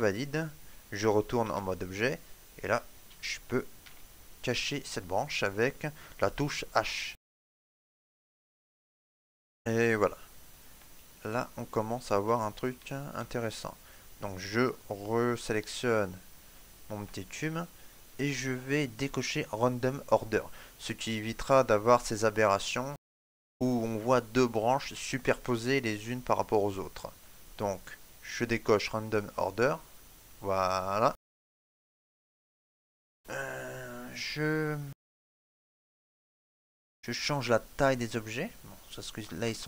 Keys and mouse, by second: 2.2 right click, 3.6 h, 6.9 shift+middle click, 7.3 middle click, 8.6 shift+middle click, 9.2 ctrl+middle click, 10.6 ctrl+middle click, 10.7 shift+middle click, 12.2 shift+middle click, 12.8 ctrl+middle click, 15.0 right click, 15.7 shift+middle click, 16.0 middle click, 16.7 ctrl+middle click, 17.0 middle click, 22.2 middle click, 22.3 shift+middle click, 29.6 click, 30.8 shift+middle click, 31.0 shift+middle click, 31.1 middle click.